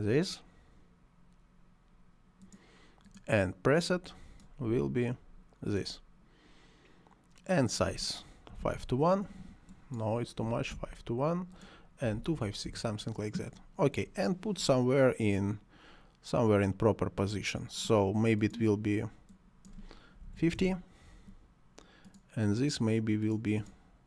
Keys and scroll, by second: 8.5 5, 8.7 4, 8.8 2, 10.5 5, 10.7 1, 11.6 2, 12.4 6, 12.6 Return, 20.2 5, 20.3 0, 20.6 Return.